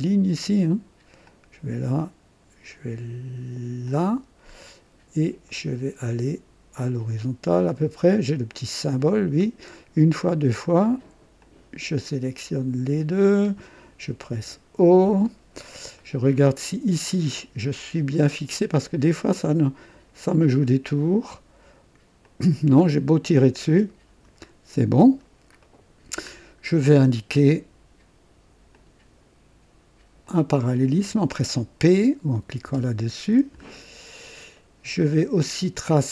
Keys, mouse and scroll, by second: 1.2 click, 3.8 click, 4.6 right click, 5.5 right click, 8.4 click, 9.7 right click, 10.2 right click, 11.4 click, 13.1 click, 14.3 o, 15.2 right click, 16.0 right click, 17.1 right click, 17.7-18.5 scroll up 3, 20.3 click, 22.2 click, 23.4 click, 24.4-25.3 scroll down 3, 24.7 typing, 25.6 right click, 26.2 scroll up 1, 26.8 right click, 28.7 click, 30.2 click, 30.7 typing, 32.6 typing, 33.6-34.0 scroll down 1, 34.5 right click, 35.1-35.8 typing, 35.7 right click.